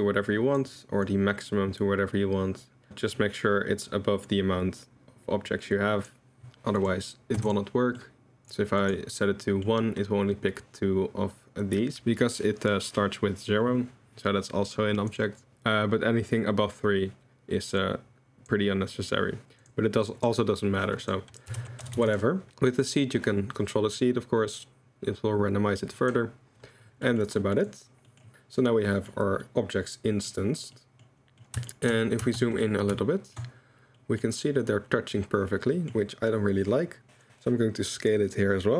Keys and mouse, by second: 1.0-6.0 drag, 6.9 click, 8.0-8.3 middle drag, 8.8 click, 9.4 middle drag, 15.2 middle click, 17.8 middle click, 19.4 middle click, 20.0 middle click, 21.0-22.1 drag, 21.9 0, 22.5-26.1 drag, 27.0 click, 27.6 drag, 28.8 drag, 29.4-30.3 drag, 30.7 drag, 31.1 middle drag, 31.7 middle drag, 32.4 middle click, 32.5 click, 32.5 middle click, 33.0-34.0 shift+middle drag, 34.2-38.7 middle drag.